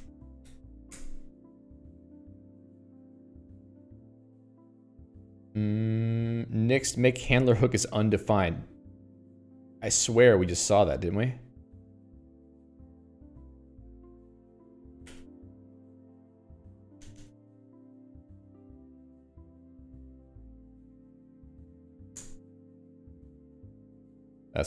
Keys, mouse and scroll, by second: 9.9 Escape, 10.7 click, 11.2 j.